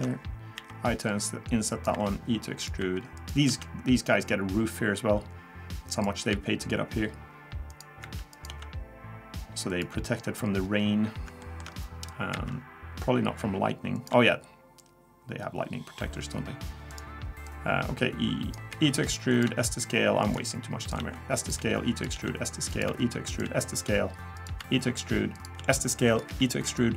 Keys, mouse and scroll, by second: 0.6 i, 1.9 e, 2.8 e, 3.5 s, 6.3 e, 8.0 e, 8.5 s, 10.6-11.0 scroll down 1, 11.4 shift+middle click, 11.7 scroll up 1, 12.3 e, 14.1 s, 17.5 click, 18.7-23.4 typing, 25.6 s, 26.3 e.